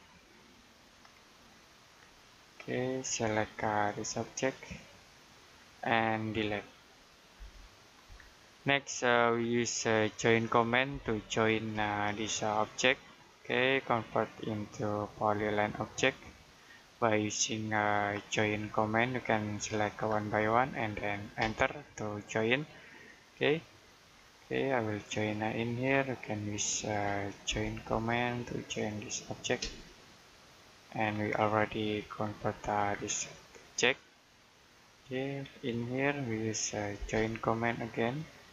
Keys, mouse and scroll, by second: 1.1 middle click, 2.0 click, 2.7 middle click, 3.1-4.9 scroll up 1, 4.9 click, 5.4-5.9 scroll down 1, 5.9 middle click, 7.2 Delete, 7.8-8.5 scroll down 1, 8.5 middle click, 9.1-10.0 scroll up 1, 10.0 middle click, 10.7 j, 11.6 space, 12.0 click, 13.0 middle click, 13.4-14.0 scroll up 1, 14.0 click, 18.2 middle click, 19.0 click, 20.1-20.5 scroll down 1, 20.5 middle click, 21.3 space, 22.9 click, 24.0-24.7 scroll up 1, 24.7 Escape, 25.1-26.8 scroll up 1, 26.8 Escape, 27.8 space, 28.2 click, 29.5 space, 30.4 click, 30.9-31.5 scroll down 1, 31.5 middle click, 32.1-32.4 scroll down 1, 32.4 middle click, 32.8 scroll down 1, 33.5 middle click, 35.0-36.2 scroll up 1, 36.2 Escape, 37.0 space, 37.4 click, 38.4 space.